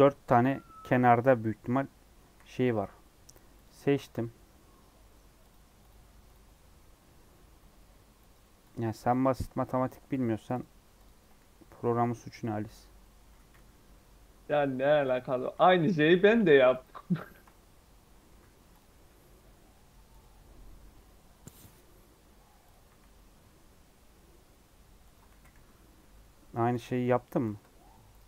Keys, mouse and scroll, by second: 1.5 3, 2.2 c, 11.4 scroll down 1, 11.6 middle click, 12.0 scroll up 3, 12.3-13.4 middle drag, 13.4 e, 15.3 s, 16.9 scroll down 1, 17.1 shift+middle click, 17.8 scroll up 1, 18.2 e, 18.8 s, 20.8-21.3 scroll up 1, 21.3 middle click, 22.2 e, 25.2 g, 26.8 s, 27.5 Tab, 27.7 scroll down 1, 28.0 click.